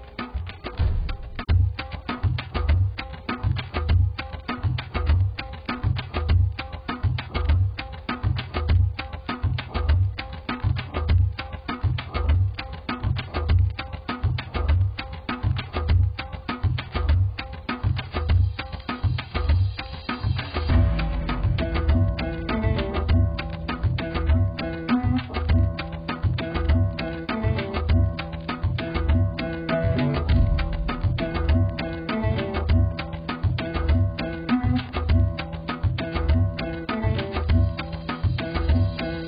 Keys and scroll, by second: 31.6 z.